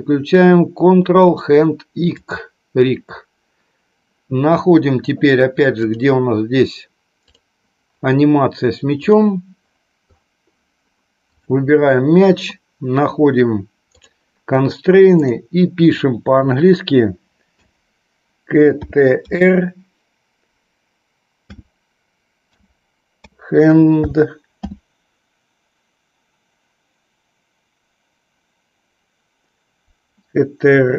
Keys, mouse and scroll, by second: 6.0 click, 7.4 click, 9.2 click, 11.3-30.9 drag.